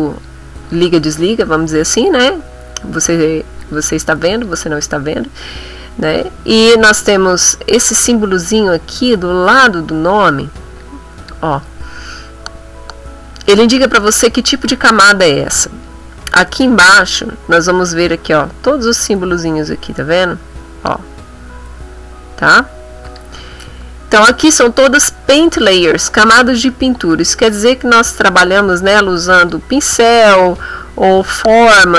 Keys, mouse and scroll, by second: 0.0 click, 0.7 click, 2.5 click, 3.6 click, 4.3 click, 5.5 click, 10.8 click, 16.7 click, 23.0 click, 28.2 click, 29.4 click.